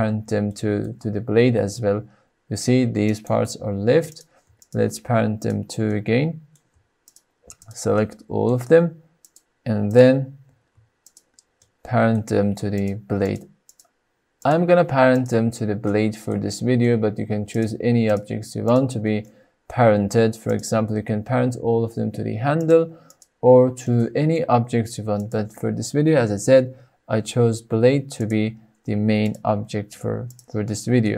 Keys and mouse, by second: 0.4 shift+click, 1.8 r, 3.0 right click, 4.0 drag, 4.5 shift+click, 5.3 shift+click, 5.9-6.4 middle drag, 7.5 shift+click, 8.0-8.4 middle drag, 9.1 shift+click, 10.9 shift+drag, 11.6-12.1 middle drag, 13.1 shift+click, 13.5 shift+drag, 15.0-15.3 shift+drag, 15.8-16.2 middle drag, 16.4-16.7 shift+middle drag, 17.4 shift+drag, 18.5 shift+click, 19.2-19.6 middle drag, 20.3-20.7 shift+drag, 22.5 shift+click, 23.0 shift+click, 23.8-24.2 shift+middle drag, 25.1 shift+click, 27.2 ctrl+p, 29.1-29.4 drag, 30.2 click, 30.5 middle click.